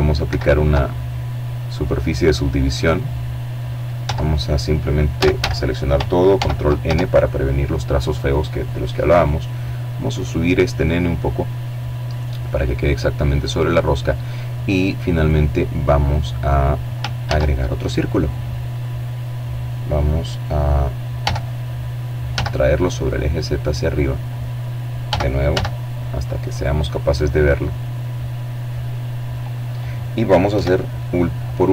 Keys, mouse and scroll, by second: 0.0 middle click, 1.8 Tab, 2.9 a, 4.1 ctrl+n, 4.7 ctrl+Tab, 7.0 right click, 8.2-10.4 drag, 10.5-11.8 middle drag, 13.0 right click, 15.1 shift+a, 16.6 click, 19.0 g, 20.2 z, 21.8 click, 22.9 g, 23.4 z, 24.3 click, 24.6-25.2 scroll down 1, 25.8-27.6 drag, 28.3 KP_7, 29.4-30.3 scroll up 1.